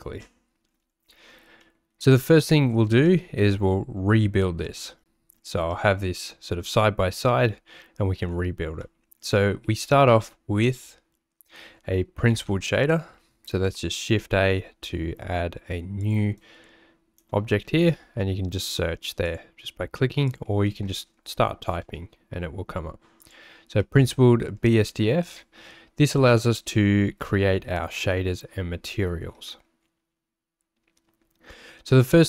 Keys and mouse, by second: 1.7 middle click, 3.0 middle click, 4.7 middle click, 5.6-8.1 middle drag, 8.8 middle click, 9.6 shift+a, 16.3 click, 17.6 shift+a, 23.9 middle click.